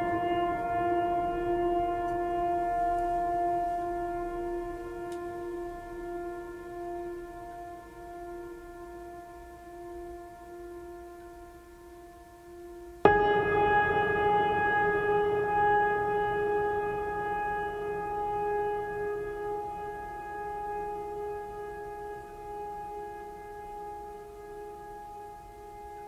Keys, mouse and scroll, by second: 4.8-5.1 drag, 6.9 scroll down 1, 7.9-8.8 drag, 10.9 scroll down 1, 12.2 click, 14.2 scroll down 1, 15.9 click, 16.6 right click, 16.9-19.0 drag, 19.8 right click, 20.2 click, 20.7 right click, 20.9 click, 22.0 right click, 22.4-23.3 drag.